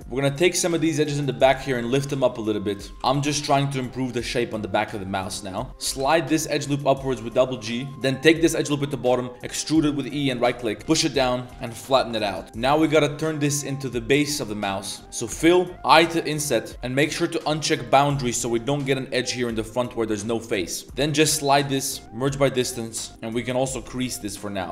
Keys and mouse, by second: 0.0 ctrl+z, 0.0 middle click, 0.0-2.9 typing, 0.3 middle click, 2.1 middle click, 3.9 middle click, 4.4 middle click, 4.7 middle click, 5.1 shift+middle click, 5.3 middle click, 5.7 g, 5.8 g, 7.9 ctrl+z, 7.9 e, 8.3 e, 10.6 click, 10.8 g, 11.5 s, 12.4 click, 12.4 Tab, 12.4 g, 12.9 click, 13.4 click, 14.4-15.0 drag, 15.3 f, 17.4 click, 17.8 click, 18.0-18.3 middle drag, 19.3 click, 19.5 click, 20.0 middle click, 20.5 middle click, 20.8 1, 20.9 click, 20.9 right click, 21.2 g, 22.0 a, 22.0 m, 22.9 drag, 22.9 right drag, 23.7 click, 24.4 middle click, 24.6 Tab.